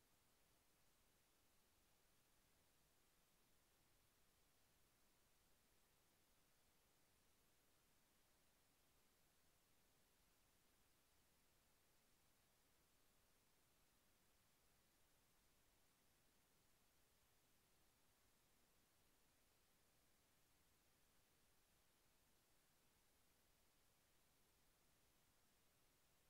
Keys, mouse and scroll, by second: 2.3 click, 5.8 click, 7.8 click, 10.9 click, 14.8 h, 17.0 g, 23.8 click.